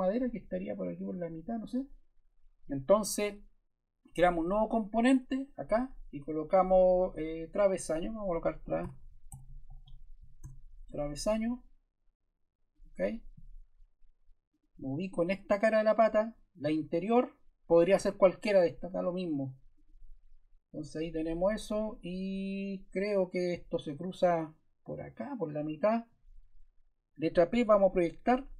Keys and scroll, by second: 8.3-10.8 typing, 27.5 p.